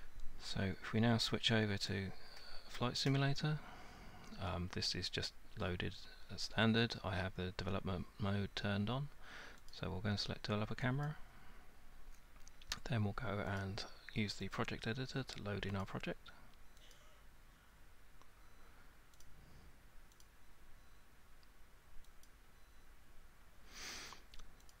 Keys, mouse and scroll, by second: 1.9 click, 9.7 click, 11.1 click, 13.6 click, 14.6 click, 15.8 click, 16.9 click, 19.2 click, 20.2 click, 22.2 click, 24.7 click.